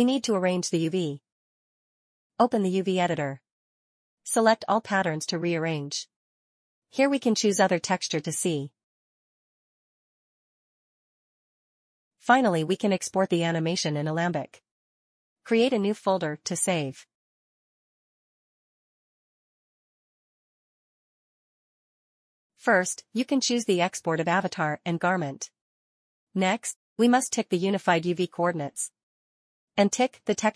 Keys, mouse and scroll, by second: 1.0-1.4 scroll up 1, 2.1 middle click, 2.5 middle click, 3.0 ctrl+a, 4.9 click, 6.0 click, 8.9 scroll down 1, 10.5 scroll up 1.